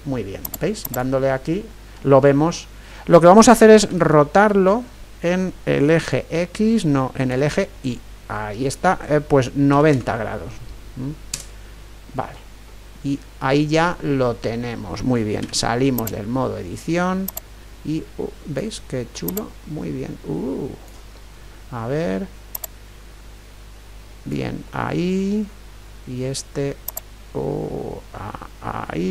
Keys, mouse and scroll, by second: 3.9 r, 12.6-16.1 middle drag, 15.5 Tab, 16.1 Tab, 17.3-21.1 drag, 21.1-24.2 middle drag, 22.5-24.4 drag, 24.7-26.9 middle drag, 26.9-28.8 drag.